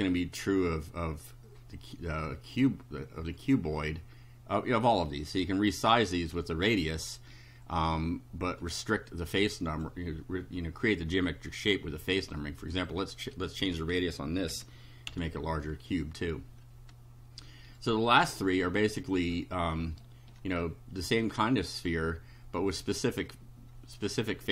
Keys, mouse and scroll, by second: 9.3 click, 12.7 click, 13.7 2, 14.5 ,, 15.1 F5, 17.8-19.2 right drag, 19.4-19.8 shift+scroll up 3, 20.0-22.1 shift+right drag, 23.3 click.